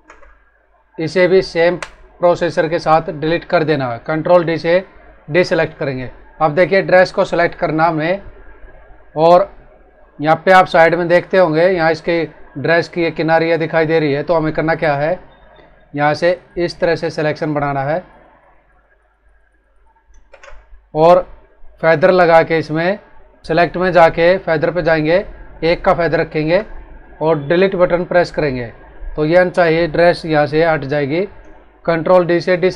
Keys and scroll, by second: 0.0 ctrl+Return, 1.6 Delete, 5.2 ctrl+d, 11.2 ctrl+=, 14.2 ctrl+-, 20.2 ctrl+Return, 28.2 Delete.